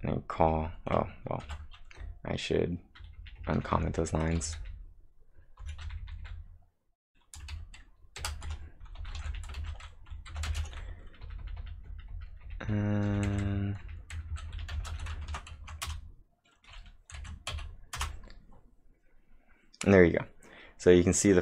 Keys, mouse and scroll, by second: 1.4 ctrl+`, 1.7-4.6 typing, 4.4 ctrl+v, 8.2-15.0 typing, 15.3 ctrl+`, 15.6 Up, 15.9 Return, 17.2 Up, 17.5 Up, 18.0 Return.